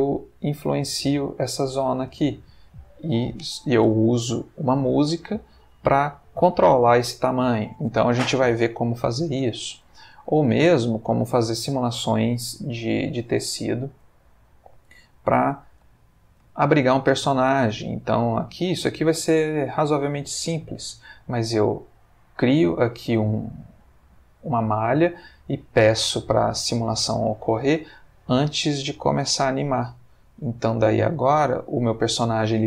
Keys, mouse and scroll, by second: 1.6 Escape, 2.1 space, 8.8 Escape, 10.2 click, 10.8 click, 12.6 click, 14.0 click, 15.2-15.9 middle drag, 16.0-17.7 ctrl+middle drag, 17.8 space, 23.1-23.9 middle drag.